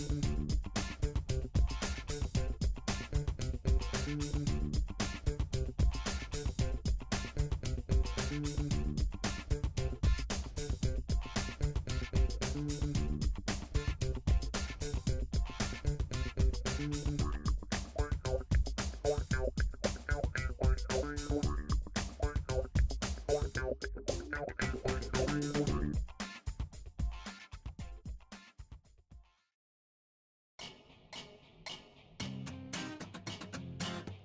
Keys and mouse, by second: 5.0-5.4 shift+middle drag, 7.5-11.8 shift+middle drag, 10.5 e, 14.1 click, 21.6 g, 26.4 click, 27.1 Tab, 29.0 KP_3, 29.1 Tab, 31.0 click, 33.8 e.